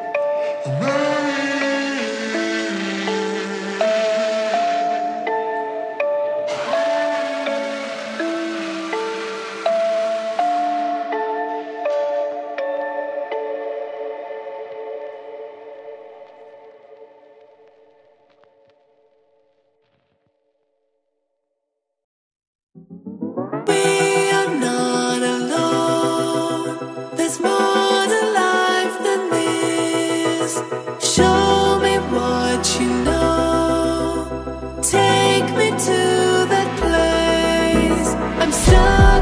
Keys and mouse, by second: 1.0 middle click, 2.8 middle click, 3.2 ctrl+middle click, 4.7 KP_Decimal, 5.7 ctrl+middle click, 6.2 middle click, 7.1 middle click, 9.5 ctrl+middle click, 9.9 shift+middle click, 10.2 middle click, 11.0 shift+middle click, 11.4 ctrl+middle click, 17.4 click, 19.5 click, 20.2-21.3 drag, 21.9 click, 22.0-29.4 drag, 25.9 BackSpace, 33.0 click, 33.8 KP_Decimal, 34.7-35.5 ctrl+middle drag, 35.5 shift+click, 35.7 ctrl+click, 35.7 ctrl+middle click, 37.9 shift+a.